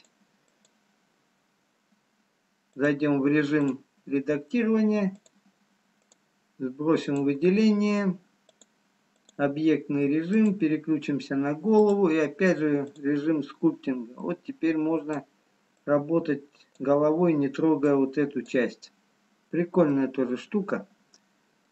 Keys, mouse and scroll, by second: 18.9 scroll up 2, 20.8 middle click.